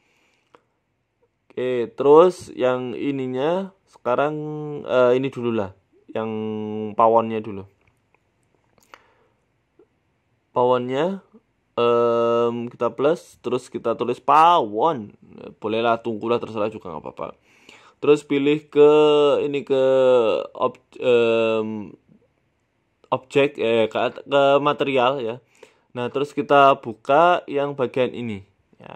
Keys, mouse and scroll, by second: 0.4 click, 2.0 scroll up 3, 2.3 shift+middle click, 6.4 shift+middle click, 8.4 middle click, 9.5 middle click, 10.4 right click, 10.9 shift+middle click, 11.1 shift+middle click, 12.8 click, 13.1 click, 14.0 click, 16.7 click.